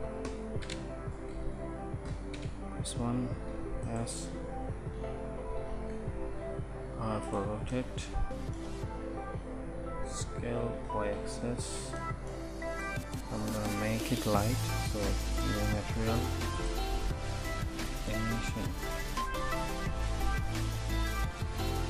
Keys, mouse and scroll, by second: 3.6 s, 5.0 KP_1, 5.8 s, 5.8 t, 6.4 r, 9.3 s.